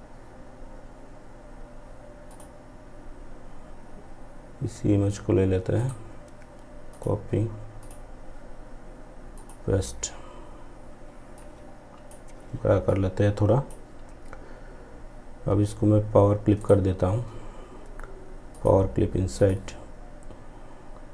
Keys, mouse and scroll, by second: 0.1 scroll down 1, 1.3 click, 4.8 right click, 5.9-11.8 drag, 11.8-15.0 drag, 15.6 right click, 17.5 click.